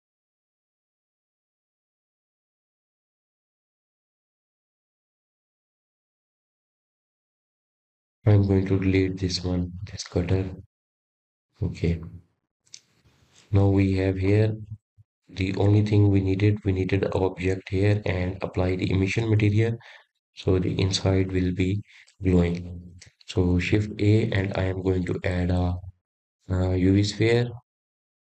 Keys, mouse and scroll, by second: 0.3 click, 1.3 click, 2.0 click, 2.8-5.9 drag, 8.5 click, 9.5-11.6 drag, 12.3 click, 12.8-15.8 right drag, 17.6-19.3 middle drag, 19.3-20.7 scroll up 3, 20.7-23.7 middle drag, 24.9 click, 25.6 click.